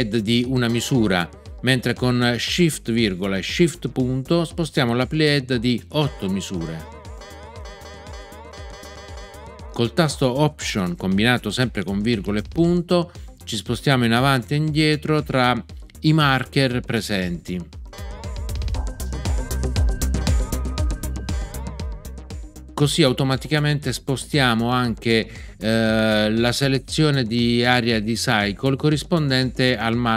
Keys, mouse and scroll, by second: 0.6 ., 5.9 shift+., 8.5 ,, 17.9 alt+..